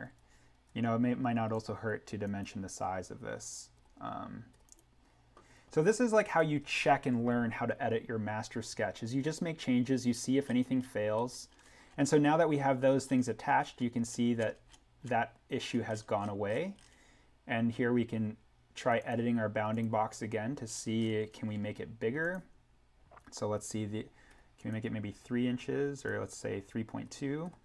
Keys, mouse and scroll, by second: 0.7 d, 1.5 click, 4.7 click, 10.0-11.4 scroll up 1, 18.9 click, 20.6-21.5 scroll up 1, 22.2 click, 24.2 3, 24.6 click, 27.0 3.